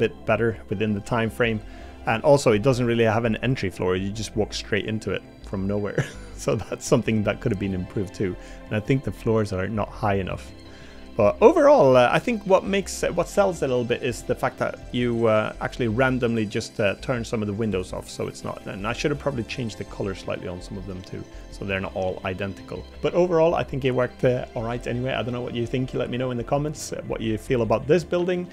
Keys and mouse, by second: 2.7-3.9 middle drag, 5.1 middle click, 6.7 middle click, 7.7 middle click, 8.9 middle click, 10.3 middle click, 11.2 middle click, 13.9 middle click, 14.8 middle click, 16.1 middle click, 17.1 middle click, 18.2 middle click, 20.8 middle click, 21.5 middle click, 22.1 middle click, 22.6 middle click.